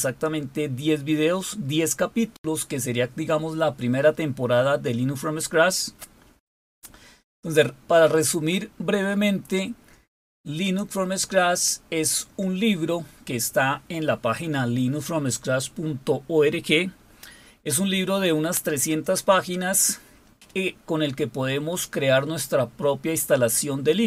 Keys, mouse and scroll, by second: 5.6-6.5 scroll down 3, 10.3 click.